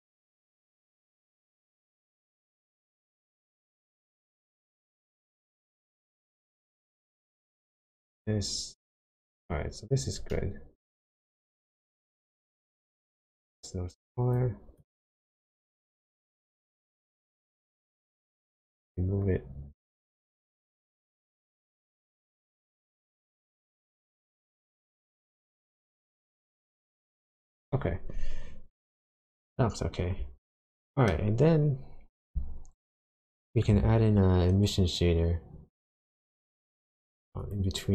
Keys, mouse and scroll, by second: 2.6 shift+click, 10.3 shift+middle click, 11.7 shift+click, 14.8 shift+click, 18.9 shift+click, 22.3 shift+click, 29.4-30.4 scroll down 6, 30.4 shift+middle click, 31.5-33.2 scroll down 2, 33.2 click, 33.8 shift+a.